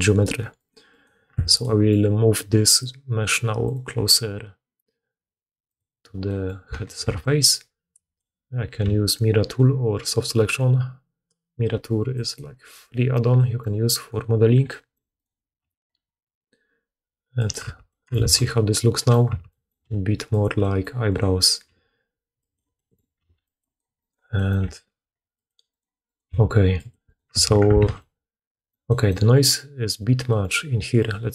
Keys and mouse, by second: 0.0 middle click, 0.5 click, 0.7 middle click, 0.8 click, 0.9 middle click, 1.3 Tab, 5.3 click, 6.4 click, 6.7-13.1 ctrl+drag, 6.9 ctrl+d, 13.9 middle click, 15.1 middle click, 15.5 click, 15.5 g, 17.4-18.6 middle drag, 17.6 Tab, 18.1 alt+a, 18.6 click, 19.2 Tab, 19.8 g, 21.0 click, 21.5 g, 23.1 g, 23.5 click, 23.9 click, 24.5 g, 26.2 g, 27.2 Tab, 27.6 alt+click, 27.7 alt+a, 30.9 click.